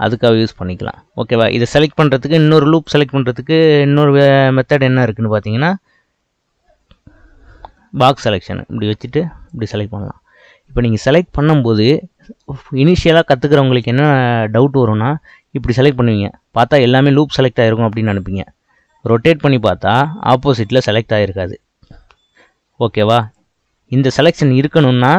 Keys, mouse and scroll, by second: 0.0 click, 0.9-2.8 middle drag, 2.8 click, 4.9 click, 8.2 click, 18.8-21.9 middle drag, 23.2 click, 24.2 click.